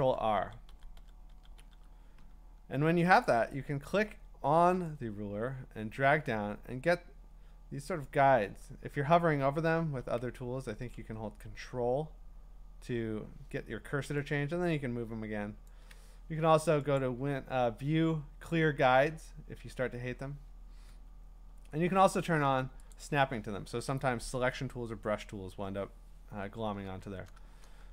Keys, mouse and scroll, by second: 0.0 ctrl+r, 0.4 ctrl+r, 0.7 ctrl+r, 1.0 ctrl+r, 1.3 ctrl+r, 1.6 ctrl+r, 8.0-14.3 drag, 15.7 ctrl+click, 17.0 click, 20.9 Escape, 22.9 click, 26.2 Escape.